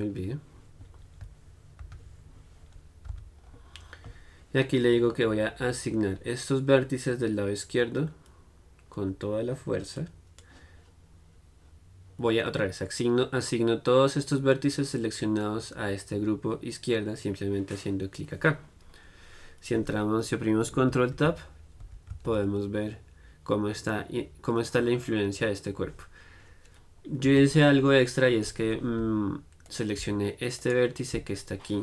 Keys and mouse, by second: 3.3 z, 5.5-10.2 middle drag, 10.2-22.1 drag, 22.1 ctrl+Tab, 22.5 ctrl+Tab, 27.5 Tab, 28.3-29.9 middle drag, 29.9-31.8 drag.